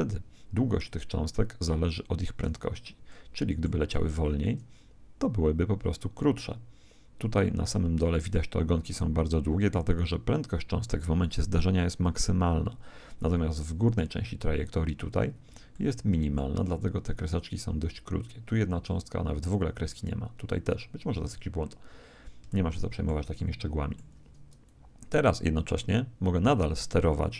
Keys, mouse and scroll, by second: 1.9-8.8 middle drag, 14.0-17.4 middle drag, 21.8 middle click, 22.4-25.0 middle drag, 24.6 click.